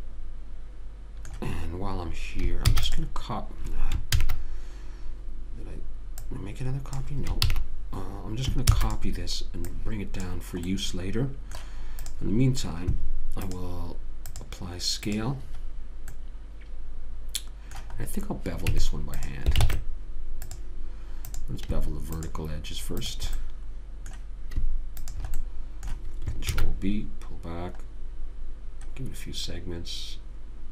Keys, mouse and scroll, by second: 0.0-1.6 middle drag, 3.0 shift+d, 4.5 ctrl+z, 7.8 ctrl+z, 9.0 shift+d, 10.0 click, 10.9 click, 12.3 click, 15.5 click, 16.6-19.0 middle drag, 19.0 Tab, 19.9 ctrl+Tab, 21.6-25.0 drag, 23.7-25.0 middle drag, 26.9 ctrl+b.